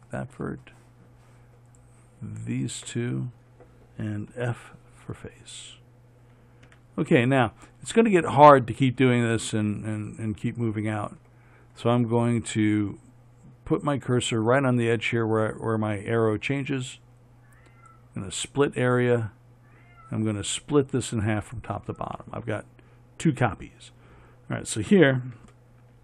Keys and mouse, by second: 4.7 f, 7.0 a.